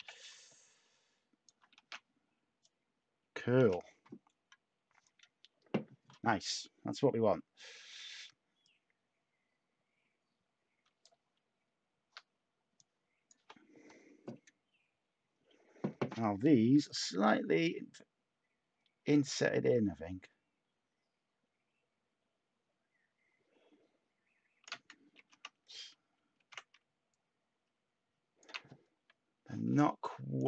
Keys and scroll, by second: 1.7 a, 7.2 Tab, 25.1 ctrl+x, 26.3 ctrl+z.